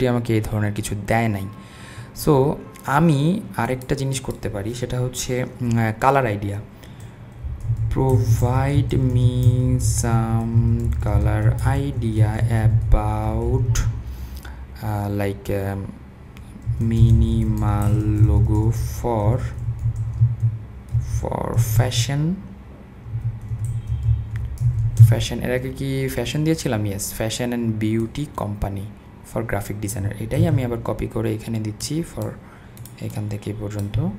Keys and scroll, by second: 7.2-10.2 typing, 13.7 typing, 16.5-18.8 typing, 19.9-21.8 typing, 22.9-25.1 typing, 30.4 super+c.